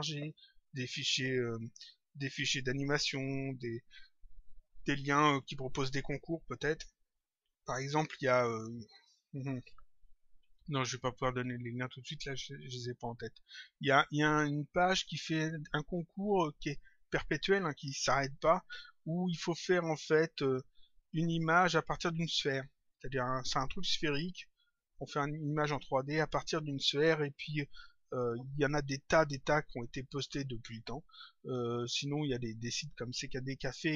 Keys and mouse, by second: 12.2 click.